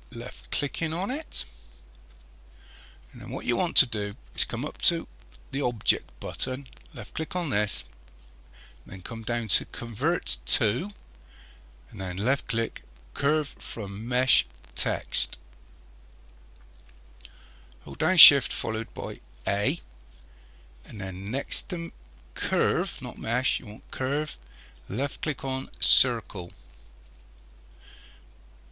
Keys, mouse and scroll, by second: 0.1 click, 7.1 click, 19.4 shift+a.